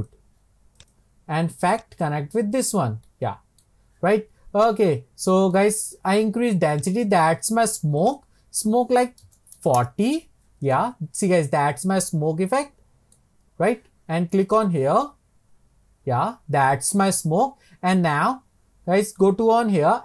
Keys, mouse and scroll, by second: 0.1-2.8 drag, 3.3-6.9 middle drag, 6.9-11.5 drag, 11.5-12.1 scroll up 2, 12.1-14.6 middle drag, 14.6 click, 15.4 scroll down 2.